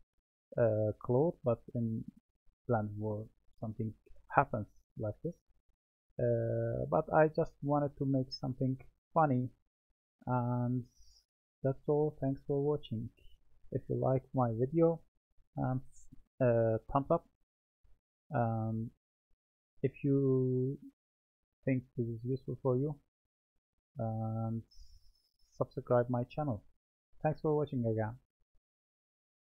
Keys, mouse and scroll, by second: 1.6-4.6 middle drag.